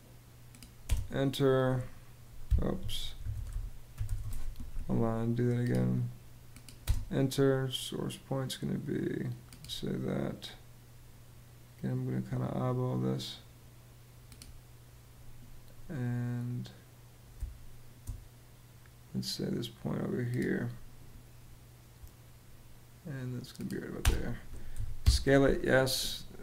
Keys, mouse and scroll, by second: 0.5 space, 2.3 Escape, 2.6-4.2 typing, 6.5 space, 17.0 space, 23.7 space, 24.4 y, 24.7 Home.